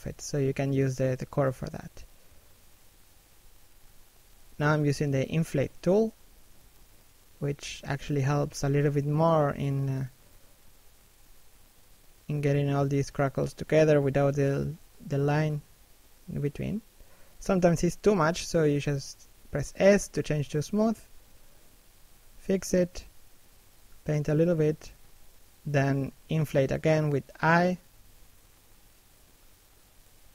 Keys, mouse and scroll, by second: 0.1 click, 1.7 shift+middle click, 2.4 click, 3.4 shift+middle click, 3.7 click, 6.1-6.6 scroll down 1, 6.6 middle click, 8.7 click, 9.9 middle click, 10.5 scroll up 1, 10.7 middle click, 11.2 click, 12.6 middle click, 13.5-14.4 scroll up 1, 14.4 s, 14.7-15.1 scroll down 1, 15.1 click, 16.3 click, 17.4 i, 17.8 shift+middle click, 18.7 middle click, 19.4 click, 22.0 i, 22.5 s, 22.9 click, 24.7-25.9 scroll down 1, 25.9 middle click, 26.3 scroll down 1, 26.4 middle click, 27.7 scroll down 1, 28.0 middle click.